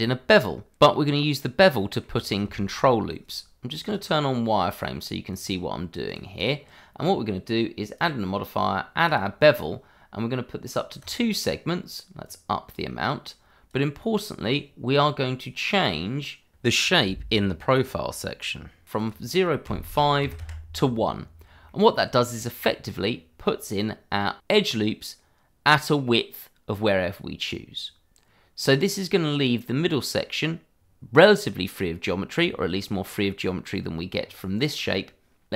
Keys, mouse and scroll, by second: 0.3-1.7 scroll up 1, 1.7 middle click, 2.5 shift+middle click, 3.8 click, 6.4 double click, 7.9 click, 14.9-15.9 scroll up 1, 17.2 click, 17.7-18.9 scroll down 1, 18.9 click, 20.2 1, 20.4 Return, 21.3-21.6 scroll down 1, 21.6 middle click, 22.6-24.4 scroll up 1, 24.7 click, 29.0 middle click, 30.8-31.4 scroll down 1, 31.4 middle click, 32.5-33.0 scroll down 1, 33.0 middle click, 34.1-34.9 scroll up 1.